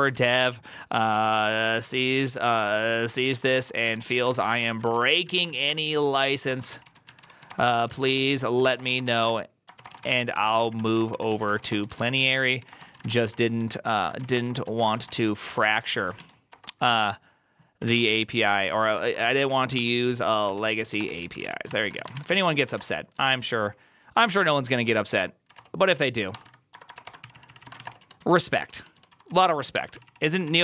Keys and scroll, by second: 0.0-30.6 typing, 27.1 ctrl+c, 27.2 ctrl+c.